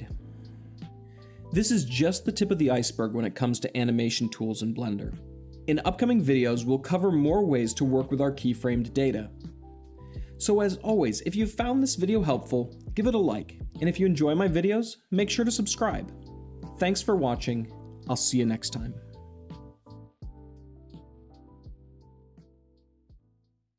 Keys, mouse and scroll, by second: 0.6 middle click.